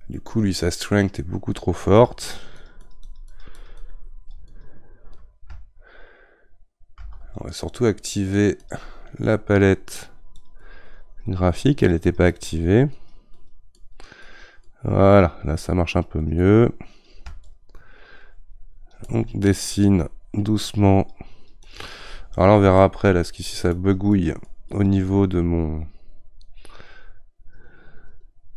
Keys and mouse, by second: 7.0 ctrl+z, 8.6-28.5 drag.